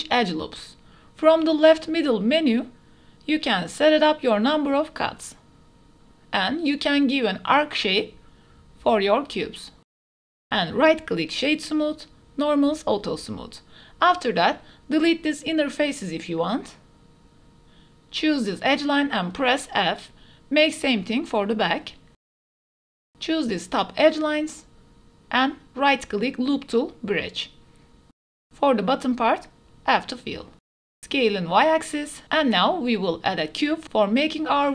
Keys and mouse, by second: 2.2 click, 6.0-9.8 drag, 10.2 Tab, 10.4 middle click, 11.5 click, 12.9 click, 13.3 click, 15.3 alt+click, 16.0 click, 16.3 x, 17.2 click, 18.6 2, 19.6 f, 20.0 click, 20.2 middle click, 20.3 click, 20.4 middle click, 20.4 click, 21.4 alt+click, 21.8 shift+click, 22.1 click, 23.2 f, 23.3 click, 23.5 middle click, 24.6 alt+click, 24.9 middle click, 25.6 middle click, 26.8 alt+shift+click, 27.3-28.4 drag, 28.6 middle click, 29.2 click, 30.4-32.7 typing, 30.6 click, 30.8 Tab, 31.1 click, 32.4 shift+click, 34.3 click.